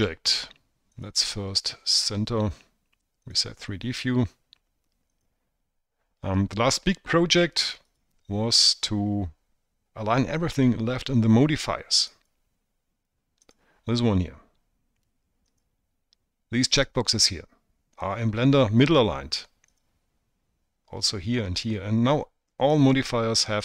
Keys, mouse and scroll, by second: 1.8-4.8 drag, 5.9 click, 8.7-9.5 drag, 12.9 click, 14.3-16.5 drag, 20.5 click, 23.5-23.6 drag.